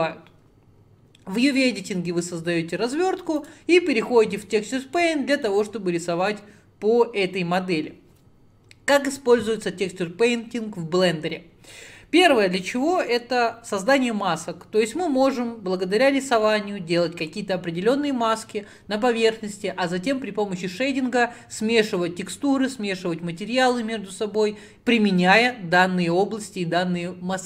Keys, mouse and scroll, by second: 3.5 click, 4.6-5.0 scroll up 4, 5.0-27.4 middle drag.